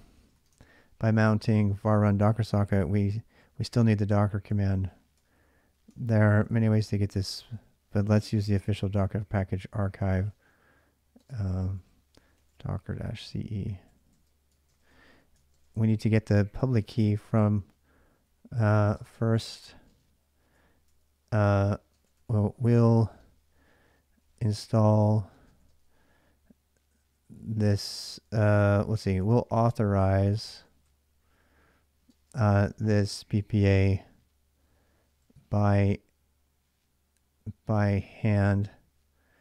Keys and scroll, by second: 0.0-1.2 typing, 4.3 ctrl+[, 4.3-9.0 typing, 10.1-25.9 typing, 27.8-30.6 typing, 31.8-35.5 typing, 37.4-39.4 typing.